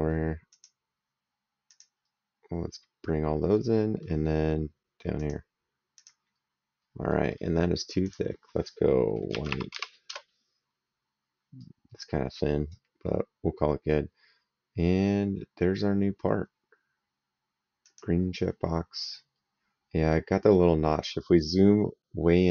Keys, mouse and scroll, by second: 0.3 click, 1.5 click, 3.3 middle click, 5.0 click, 6.9 middle click, 7.8 click, 9.1 KP_1, 9.3 KP_Divide, 9.5 KP_8, 9.9 KP_Enter, 11.4 right click, 13.7 right click, 17.6 click, 21.0 right click.